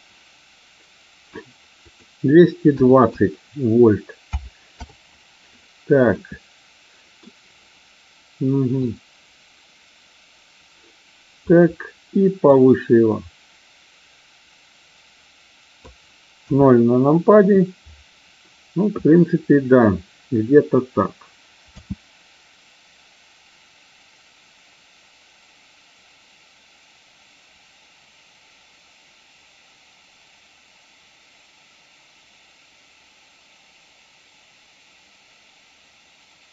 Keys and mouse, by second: 1.8-5.0 drag, 6.2-7.2 middle drag, 8.8-11.5 drag, 12.5-15.8 drag, 16.3 KP_0, 21.7 space.